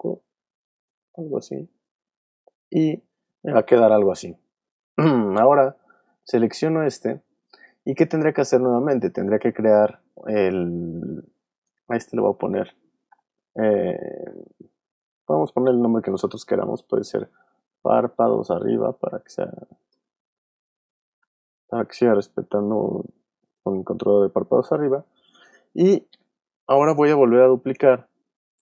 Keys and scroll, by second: 4.5 v, 13.1 Return, 17.7-19.7 typing, 20.9 b, 21.1 Return.